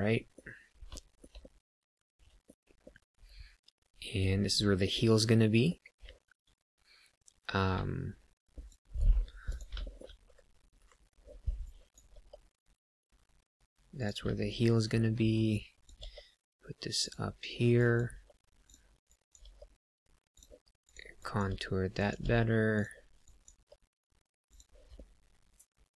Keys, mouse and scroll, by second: 0.9 shift+middle click, 1.3 middle click, 2.8 middle click, 5.1 middle click, 7.7 ctrl+r, 8.9 right click, 9.5 click, 9.8 shift+middle click, 10.2 KP_3, 10.7 KP_7, 11.5 click, 12.1 g, 13.9 click, 15.5 click, 15.9 g, 17.0 click, 17.7 click, 18.1 g, 18.6 click, 19.0 click, 19.3 g, 20.2 click, 20.8 click, 21.1 click, 21.4 g, 21.9 click, 22.2 g, 22.7 click, 23.3 click, 23.4 g, 24.5 click, 24.9 middle click.